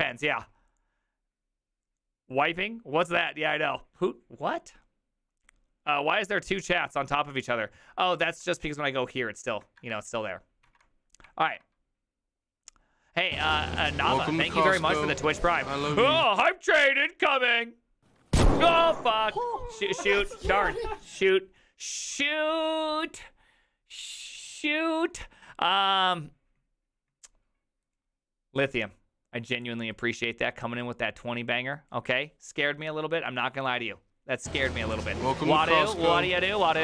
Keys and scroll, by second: 8.3 alt+{, 9.8 alt++, 10.7 alt+[, 11.5 alt++.